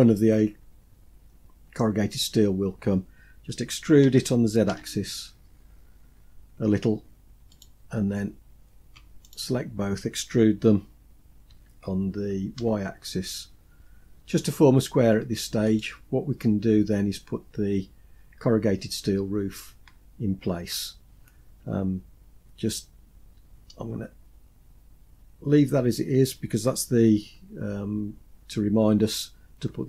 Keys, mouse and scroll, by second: 3.8 e, 9.1 shift+click, 11.3 e, 16.5-18.5 scroll down 2, 18.5-19.2 scroll down 2, 19.2-20.9 scroll down 6, 20.9 scroll down 1, 23.3-26.0 scroll up 4, 26.0-26.8 scroll down 2, 27.0 Tab, 29.4-29.8 scroll down 4.